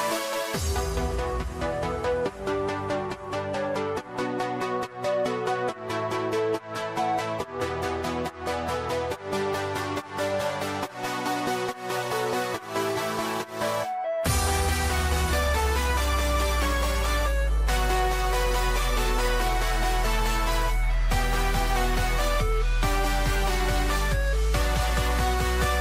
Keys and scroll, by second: 0.0 ctrl+alt+z, 1.2 ctrl+shift+z, 2.4 ctrl+shift+z, 3.4 ctrl+shift+z, 7.1 ctrl+=, 17.0 ctrl+alt+z, 19.7 ctrl+-.